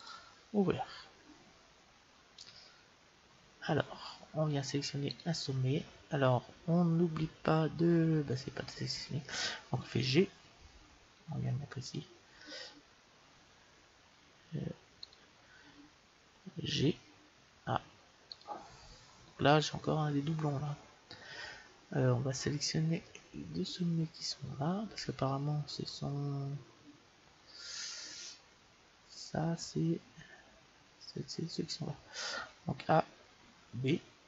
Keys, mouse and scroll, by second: 0.0-1.6 drag, 1.6-4.0 middle drag, 4.3 middle click, 5.0-6.9 right drag, 10.0 g, 14.9-16.7 right drag, 16.7 g, 22.5-27.4 middle drag, 32.7 a, 33.5 b.